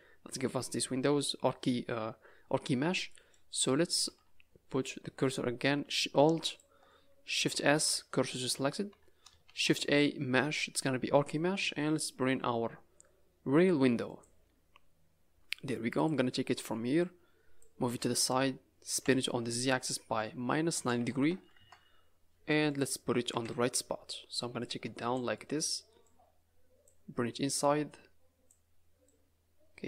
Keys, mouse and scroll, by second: 2.8 scroll up 4, 3.0 middle click, 3.5 click, 4.0 Tab, 4.3-5.2 scroll up 1, 5.2-5.8 scroll up 3, 6.4 alt+click, 7.7 shift+s, 8.8 Tab, 9.4 shift+a, 15.9 click, 17.0 click, 18.8 r, 22.4 middle click, 23.3 KP_Decimal, 24.6 click, 25.3 middle click, 26.0 click, 27.4 click, 29.0 click.